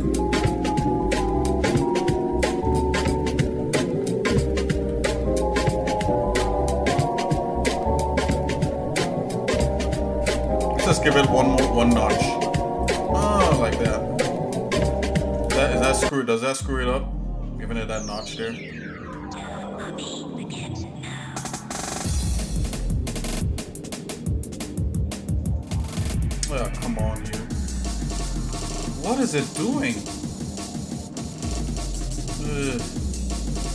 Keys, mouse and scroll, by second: 0.6 shift+middle click, 1.4 shift+middle click, 2.4 alt+shift+click, 2.8 shift+middle click, 3.3 shift+middle click, 4.6 ctrl+g, 6.2 ctrl+b, 13.3 shift+middle click, 13.8-14.4 scroll down 2, 14.5 shift+middle click, 15.4 shift+middle click, 16.0 scroll up 1, 16.5-18.1 shift+middle drag, 18.5 ctrl+z, 20.1 ctrl+b, 31.6 ctrl+z, 32.3 scroll up 2, 32.9 shift+middle click.